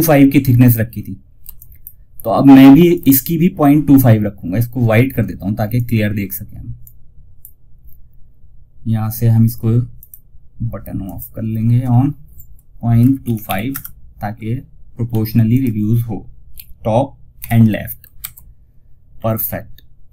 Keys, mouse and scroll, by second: 0.8 F2, 0.8 click, 5.0-9.3 drag, 14.4 click, 14.8 click, 15.8-16.7 typing, 18.4 scroll down 1.